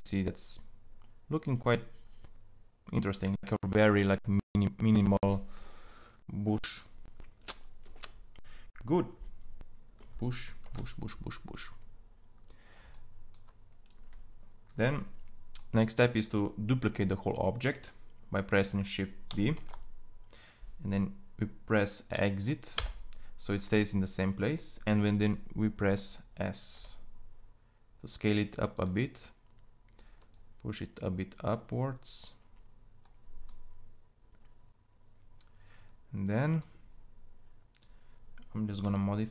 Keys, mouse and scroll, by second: 10.6 shift+z, 19.4 shift+d, 22.3 shift+d, 26.4 s, 38.4 Tab.